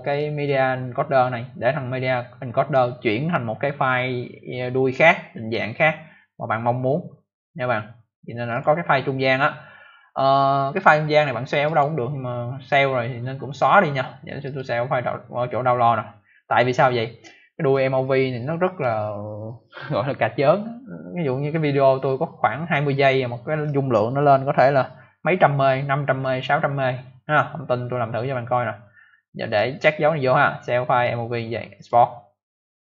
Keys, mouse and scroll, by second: 0.0 click, 8.4 click, 8.5 click, 11.6 click, 11.7 click, 12.7 scroll up 1, 14.3 click, 14.5 click, 16.4 click, 16.5 click, 31.7 click.